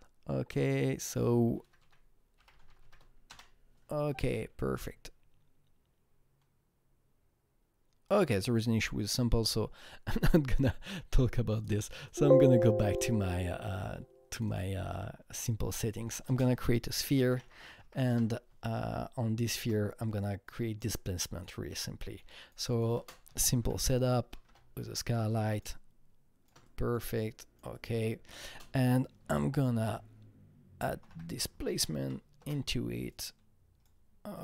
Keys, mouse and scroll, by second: 1.3-3.3 typing, 4.7 click, 8.0 Return, 8.0 click, 8.0 shift+s, 11.5 Return, 11.5 click, 12.0 click, 12.8 click, 14.9 click, 15.7 double click, 15.8 click, 16.2 ctrl+space, 16.3-17.9 typing, 18.0 Return, 18.7-21.6 shift+drag, 19.0 Return, 21.6 click, 22.2 double click, 22.7 click, 22.9 ctrl+space, 23.2 typing, 24.2 Down, 24.4 Return, 25.2-27.3 drag, 27.3-28.4 shift+drag, 28.4 ctrl+space, 29.7-31.6 typing, 31.6 Down, 31.9 Down, 32.3 Return, 33.1-34.4 drag.